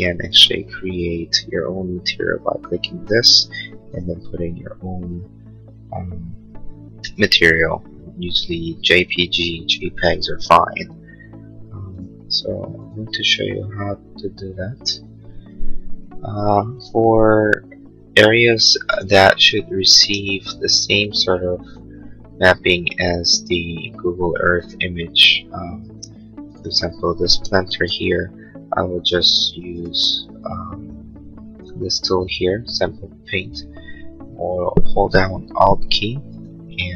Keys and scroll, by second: 25.9 space.